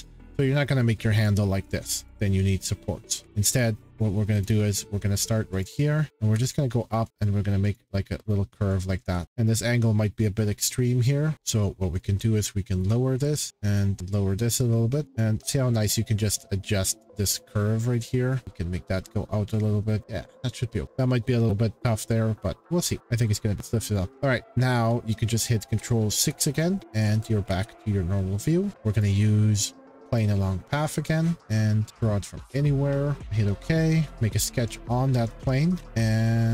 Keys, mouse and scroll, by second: 1.2 click, 1.6 click, 2.0 click, 3.2 Escape, 3.6 right click, 4.4 click, 5.6 click, 7.1 click, 7.7 click, 8.8 click, 9.2 right click, 10.5 click, 10.5-11.3 scroll, 11.3 click, 12.8 click, 13.7 click, 15.1 click, 17.3 click, 19.5 click, 20.3 click, 20.8-21.9 scroll, 22.3-23.1 scroll, 23.9 click, 24.1 scroll, 24.4 click, 25.7 ctrl+6, 27.5 middle click, 28.3 middle click, 28.3 middle click, 29.0 click, 30.2 click, 30.3-31.0 scroll, 31.0 click, 32.5 click, 33.2 click, 34.1 click, 35.2 middle click, 35.7 middle click, 35.7 middle click, 35.8 shift+middle click, 35.8 scroll, 35.8 c.